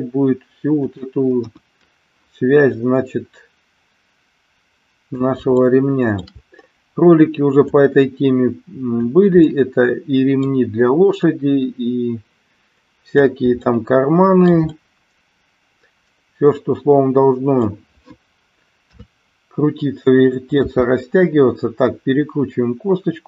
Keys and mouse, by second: 0.7 click, 1.4 KP_1, 2.7-5.1 drag, 5.6 shift+middle click, 7.6-9.0 drag, 9.4-10.5 middle drag, 11.2-13.1 drag, 13.6-14.6 shift+middle drag, 14.7-17.6 middle drag, 18.9 KP_3, 20.6 r.